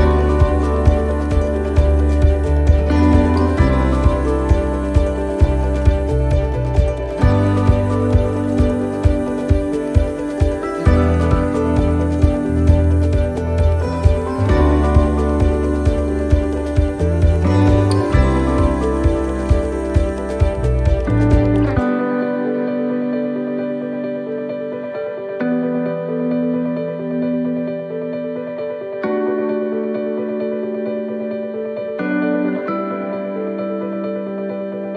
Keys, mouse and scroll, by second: 0.0 click, 0.5 middle click, 2.7 click, 6.6 s, 8.5 click, 9.9 middle click, 11.2 click, 12.5 middle click, 13.5 click, 17.0 click, 17.0 middle click, 17.3-18.4 scroll down 13, 18.1 scroll up 1, 18.5 shift+middle click, 20.3-20.6 scroll up 3, 20.9 shift+middle click, 20.9 scroll up 5, 21.5-21.9 scroll up 3, 22.4 right click, 22.8 alt+shift+right click, 23.8 s, 25.7 middle click, 26.6 middle click, 27.0 shift+middle click, 27.1 shift+middle click, 27.5 scroll up 2, 27.7 middle click, 28.2 shift+middle click, 29.3 ctrl+r, 31.9 alt+shift+right click, 32.8 e, 33.3 s, 34.5 shift+middle click.